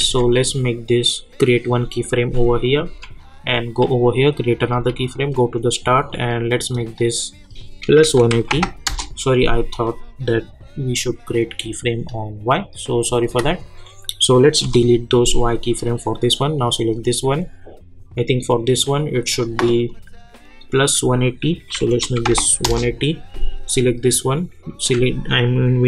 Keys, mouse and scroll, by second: 0.0 ctrl+z, 1.4 click, 2.9 k, 4.3 click, 4.7 j, 6.1-7.4 drag, 8.8 Return, 9.7 click, 13.3 F9, 15.4 click, 19.8-21.2 drag, 22.6 Return, 23.6 click.